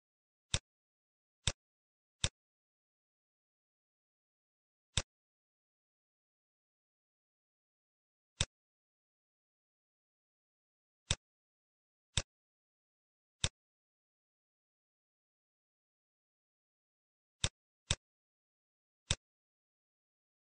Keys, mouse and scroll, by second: 2.2 click, 4.9 click, 8.5 shift+click, 11.1 click, 11.4 middle click, 12.4 shift+a, 19.2 click.